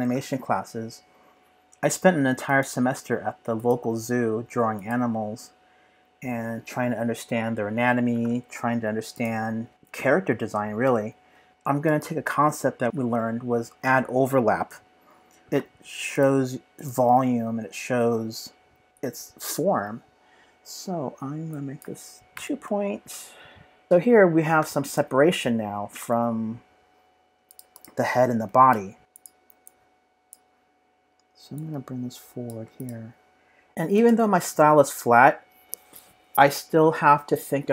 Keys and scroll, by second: 22.3 2, 22.5 Return, 29.0 super+=.